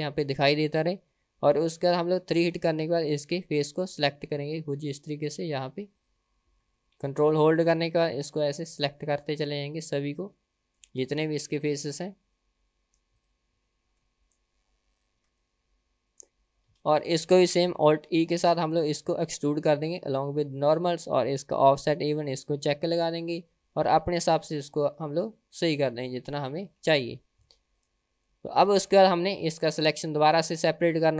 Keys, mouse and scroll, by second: 3.4 click, 5.0 ctrl+click, 6.0 ctrl+click, 7.5 ctrl+click, 8.2 middle click, 9.4 ctrl+click, 10.1 middle click, 11.7 ctrl+click, 13.1 ctrl+click, 15.0 ctrl+click, 15.5 middle click, 16.7 KP_1, 18.4 alt+e, 22.4 click, 23.3-26.7 drag, 27.5 Tab, 27.8-28.1 drag, 28.3-29.0 middle drag, 29.4 KP_1, 30.3-30.7 scroll down 2.